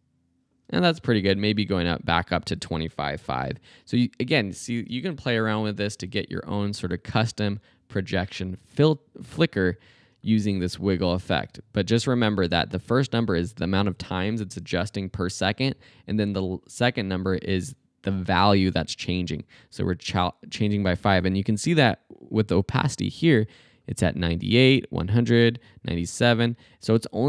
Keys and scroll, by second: 0.6 space, 2.1 Left, 2.4 Delete, 2.8 2, 3.3 5, 4.8 space.